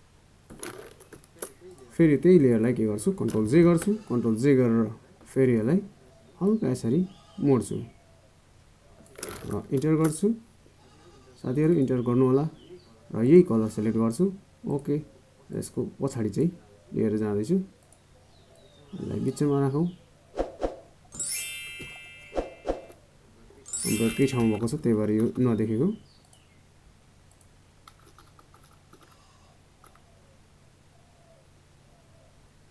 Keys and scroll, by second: 3.0 ctrl+j.